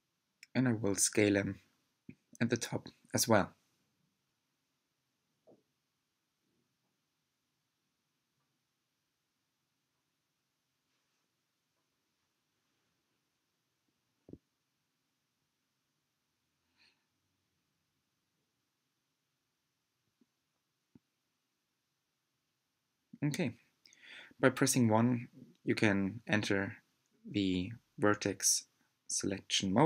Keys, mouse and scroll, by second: 0.2 shift+click, 0.5 shift+click, 0.9 shift+click, 1.8 click, 2.5 e, 4.8 middle click, 5.6 click, 6.2-6.8 scroll up 6, 7.3 s, 9.0 g, 10.8 click, 11.1 shift+drag, 11.4 shift+drag, 11.7 shift+click, 12.3 s, 16.1 click, 16.4 shift+click, 17.1 shift+click, 17.4 s, 19.7 click, 20.1 shift+click, 20.4 shift+drag, 20.7 shift+click, 21.0 s, 23.6 scroll down 5, 24.2-24.7 scroll up 3, 25.2 1, 26.3 drag, 27.0-27.4 scroll down 4, 27.7 middle click, 28.5-29.2 scroll down 2, 29.2-29.8 middle drag.